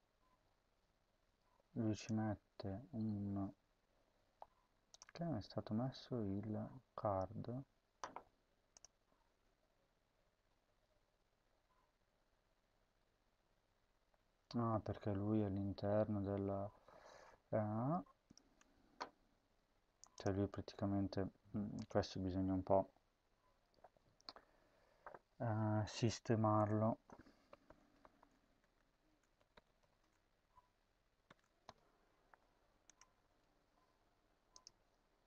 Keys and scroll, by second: 27.1-30.1 typing, 31.1 typing, 32.9 ctrl+s.